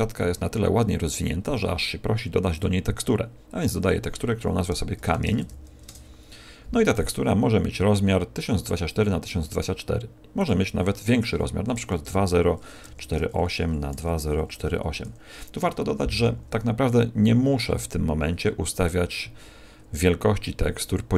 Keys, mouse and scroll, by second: 2.5 click.